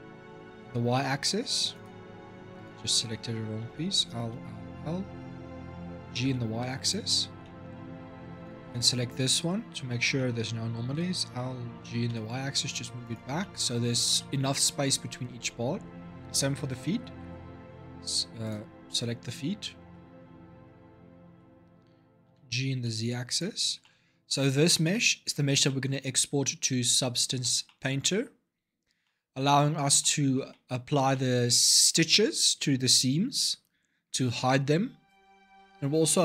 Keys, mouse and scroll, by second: 2.3 click, 3.4 l, 4.1 l, 4.9 l, 5.8 g, 7.0 scroll up 3, 7.2 middle click, 8.1 click, 8.4-10.7 middle drag, 10.7 l, 11.6 g, 13.2-17.0 middle drag, 17.0 l, 17.7 l, 18.2 click, 19.0-22.0 typing, 23.4 Tab, 23.6-24.1 middle drag, 24.1-24.4 scroll down 3, 24.4-26.5 middle drag, 26.5 scroll down 2, 27.2-29.4 shift+middle drag, 29.4-29.8 scroll up 5, 29.8-30.7 middle drag, 30.7 scroll up 2, 30.9-34.1 middle drag.